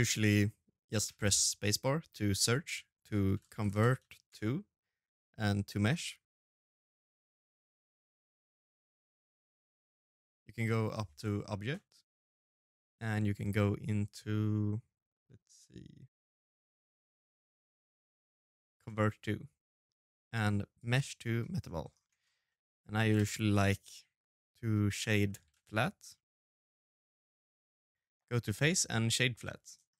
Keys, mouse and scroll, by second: 8.7 click, 17.0 shift+right click, 17.1 click, 17.3 shift+right click, 23.2 middle click, 23.4 scroll down 1, 23.6 Tab, 23.7-24.5 scroll up 3, 24.0 middle click, 24.5 a, 24.7 space, 28.9 click.